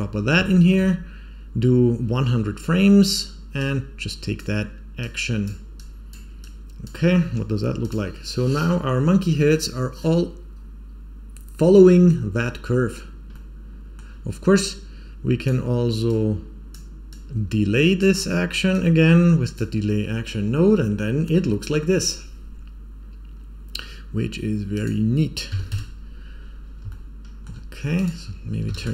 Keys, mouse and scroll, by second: 0.4 shift+middle click, 3.5 click, 4.9 click, 5.7 click, 6.3 click, 7.8 click, 13.2-13.9 middle drag, 14.6-15.4 drag, 16.0-16.6 drag, 17.0-18.0 drag, 18.6-19.5 drag, 24.6-26.3 drag, 26.8 shift+middle click, 27.9-28.9 drag.